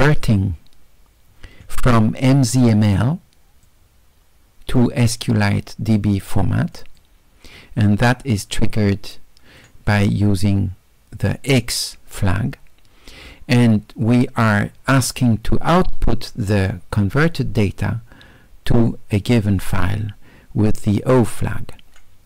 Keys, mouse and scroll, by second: 3.7-6.2 drag, 6.8 click, 8.6-9.6 drag, 13.9 middle click.